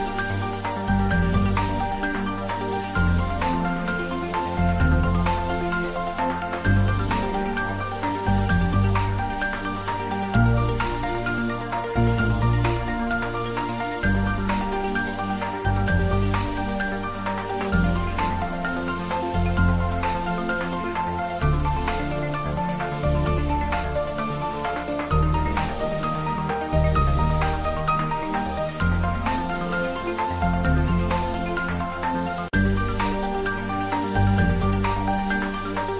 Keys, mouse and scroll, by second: 1.7 shift+click, 3.7 middle click, 4.6 shift+click, 5.8 ctrl+z, 6.3 shift+click, 7.2 middle click, 8.2 shift+click, 9.1 ctrl+z, 9.7 shift+click, 11.7 f, 12.4 middle click, 13.3 click, 13.7 ctrl+middle click, 15.5 e, 18.5 click, 18.7 Tab, 20.3 Right, 23.5 Return, 24.5 g, 25.1 Up, 26.1 Return, 26.6 ctrl+s, 26.8 middle click, 28.0 click, 28.8 ctrl+s, 28.9 middle click, 30.5 Tab, 31.1 g, 34.0 click, 34.3 middle click, 35.4 click.